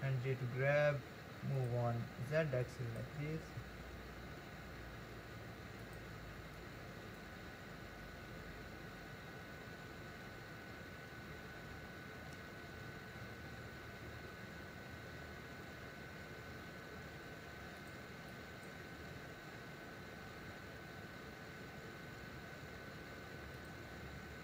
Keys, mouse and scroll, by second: 2.6 click, 3.4 g, 6.6 click, 8.3 g, 18.3 click, 18.9 g.